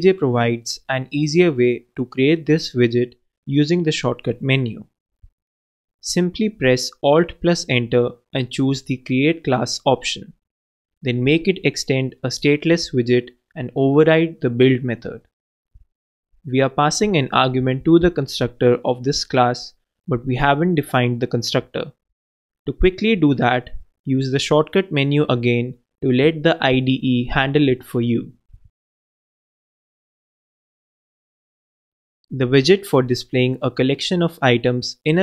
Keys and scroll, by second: 0.1 alt+Return, 7.1-8.1 typing, 11.4 alt+Return, 15.3 super+Down, 15.5 super+BackSpace, 16.5 super+Up, 22.3 alt+Return, 30.4 super+Down.